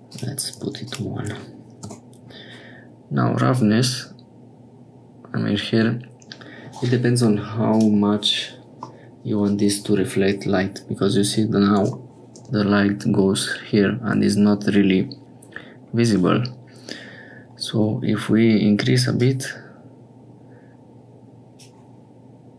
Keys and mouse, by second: 0.0 click, 0.8-2.3 drag, 3.5-6.7 drag, 7.7 click, 8.9-13.5 middle drag, 19.1-21.6 drag.